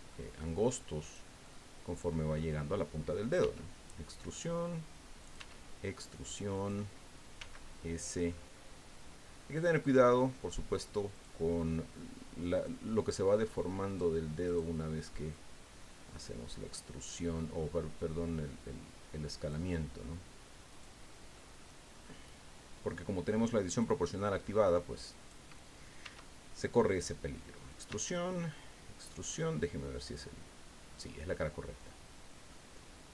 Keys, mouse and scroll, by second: 1.0 right click, 1.4-2.5 drag, 3.4 e, 5.2 click, 5.3 e, 6.5 click, 7.4 s, 8.3-8.6 scroll up 2, 11.1 click, 12.5 click, 13.8 right click, 14.4 right click, 15.3 click, 16.0-16.3 scroll up 1, 16.5 scroll up 1, 17.4 scroll down 1, 18.1 scroll down 1, 20.7 right click, 21.3 click, 23.7 click, 24.1 click, 25.2 right click, 26.0 e, 27.7 click, 27.8 e, 28.9 click, 29.3-32.7 drag, 32.7 scroll up 1.